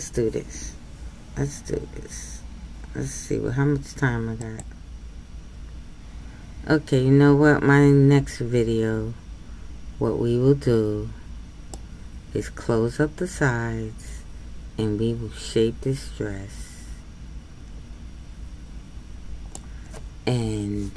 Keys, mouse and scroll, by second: 11.8-14.8 middle drag.